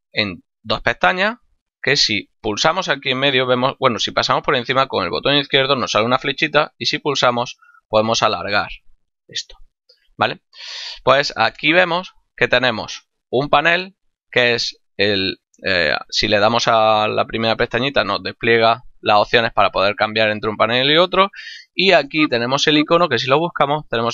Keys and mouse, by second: 1.7 click, 6.6 click, 14.9 click.